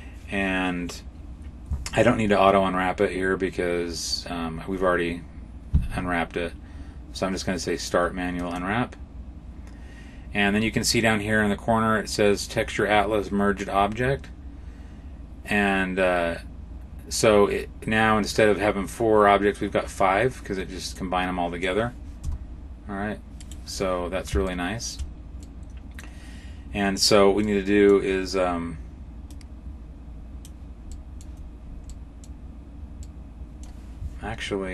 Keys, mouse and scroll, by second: 8.3 click, 20.8 middle click, 22.1 g, 24.3 shift+middle click, 25.2 middle click, 27.3 middle click, 29.1 click, 31.7 middle click, 32.9 middle click.